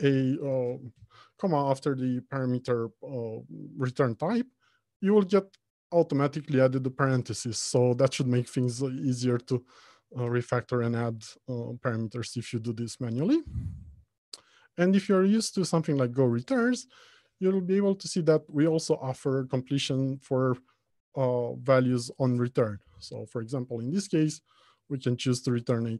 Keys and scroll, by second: 10.5 Return, 25.6 Return.